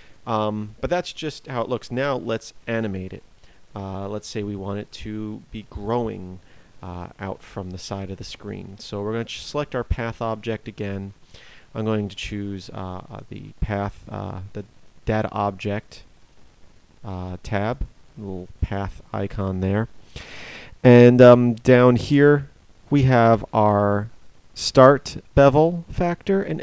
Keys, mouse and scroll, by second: 0.0 Escape.